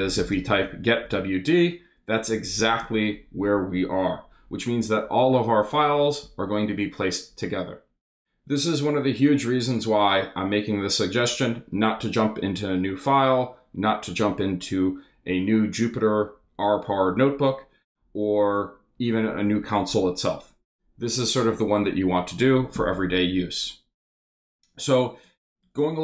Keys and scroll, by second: 0.0-1.0 typing, 1.1 shift+Return.